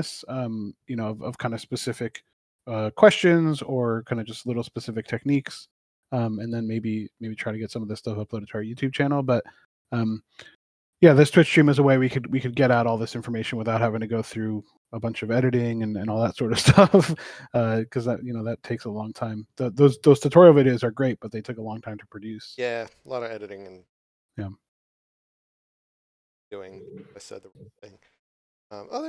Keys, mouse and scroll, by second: 6.5 click, 11.3 click.